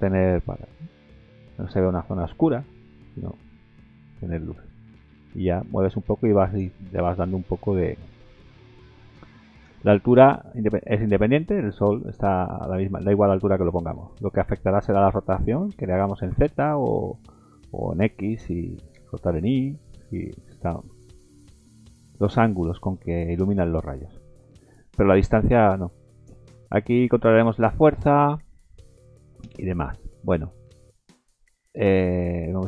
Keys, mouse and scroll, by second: 6.8 scroll up 2, 7.0 middle click, 7.6 middle click, 8.1 middle click, 9.6 g, 12.2 middle click, 13.0 shift+middle click, 13.5 scroll down 1, 13.7 middle click, 15.6 r, 18.9 r, 22.5 middle click, 23.5 scroll up 1, 23.5 middle click, 24.0-24.4 scroll down 2, 24.4 middle click, 25.7 middle click, 30.0 middle click, 31.2 middle click.